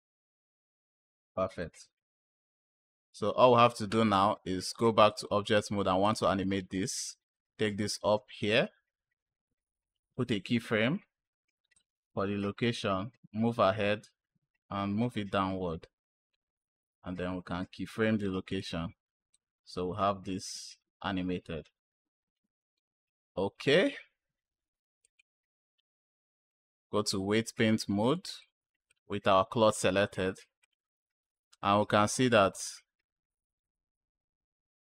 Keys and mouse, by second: 1.5 click, 4.6 click, 5.9 click, 7.2-8.4 drag, 10.0 k, 12.3 drag, 14.4-16.2 drag, 17.1 k, 19.2 click, 24.9-26.4 drag, 27.9-28.3 drag, 28.7 click, 29.6-30.6 drag, 31.5 space, 32.2 space.